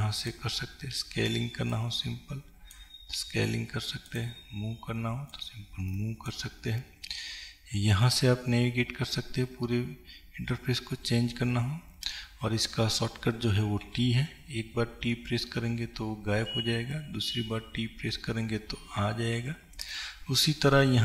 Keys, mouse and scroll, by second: 0.4-21.0 drag, 13.9 t.